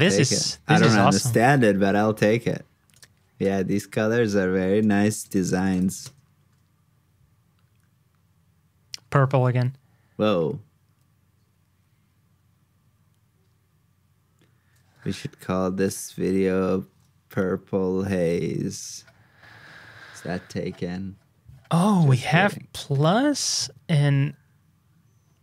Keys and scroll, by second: 5.4 super+c, 5.8 super+v, 16.9 super+Tab.